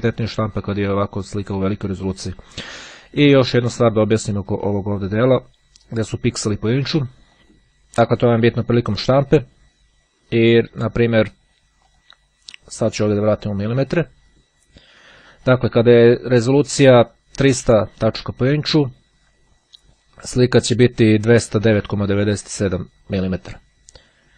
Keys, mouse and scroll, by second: 0.7 click, 3.4 click, 7.1 click, 7.6-8.8 drag, 12.0 click, 13.3 click, 15.1-16.3 drag, 20.9-23.5 drag.